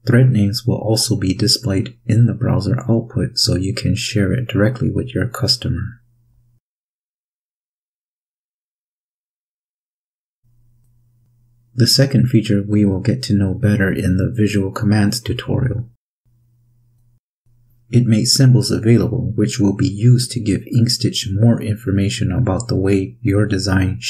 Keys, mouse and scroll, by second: 10.0 click.